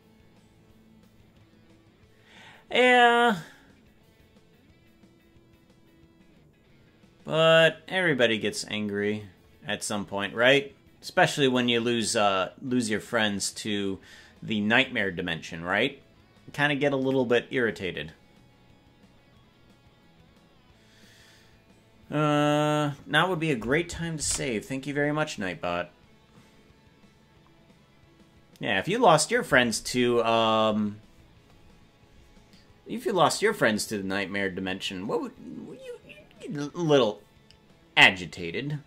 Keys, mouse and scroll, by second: 27.9 ctrl+s.